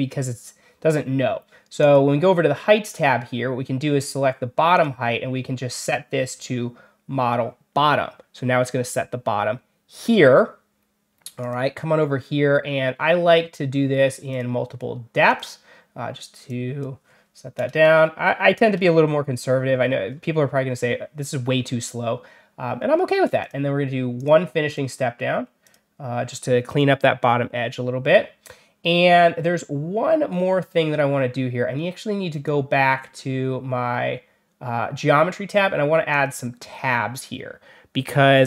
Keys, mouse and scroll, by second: 1.7 click, 4.6 click, 6.2 click, 11.3 click, 14.2 click, 15.2 click, 16.4 click, 23.3 click, 24.1 click, 24.6 click, 25.5 click, 29.3 scroll down 1, 30.2 scroll down 2, 30.7 scroll up 2, 32.2 click, 36.0 click.